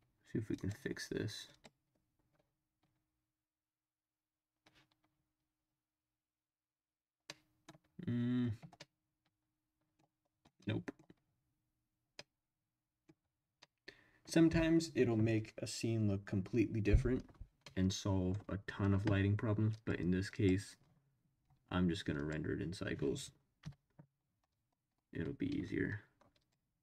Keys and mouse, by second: 0.5 drag, 7.3-7.8 middle drag, 8.8-10.0 middle drag, 10.6-11.1 middle drag, 12.2-13.1 middle drag, 13.6 middle click, 17.7-18.3 middle drag, 19.7-20.1 drag, 22.2 click, 23.6 Delete, 26.4 click.